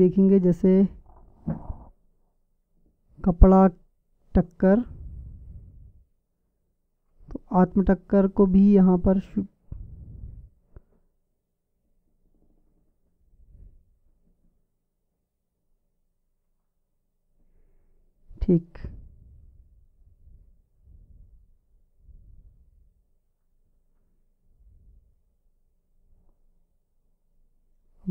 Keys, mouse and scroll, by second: 7.6-10.5 drag, 10.9-12.8 drag, 19.5-26.3 drag.